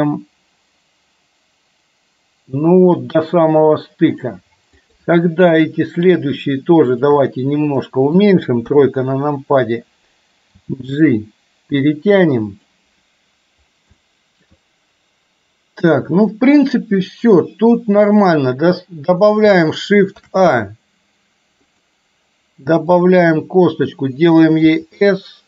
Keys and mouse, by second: 4.8 click, 5.7 middle click, 7.9 middle click, 8.8 KP_3, 10.5 g, 14.0 shift+click, 20.2 shift+a, 21.7 click, 23.0 click, 24.8 s.